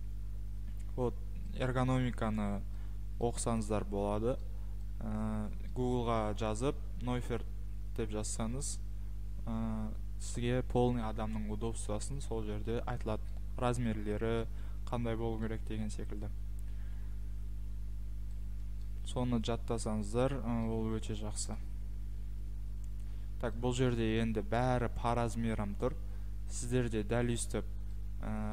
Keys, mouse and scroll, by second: 0.7-1.4 scroll, 1.5-1.9 scroll, 8.4 middle click, 13.3 middle click, 13.9 scroll, 14.4-14.9 scroll, 15.4-16.7 scroll, 17.5-17.8 scroll, 18.3-18.8 scroll, 18.8 scroll, 20.4 scroll, 21.5-22.0 scroll, 22.8-23.2 scroll, 23.9 scroll, 27.3-27.9 scroll.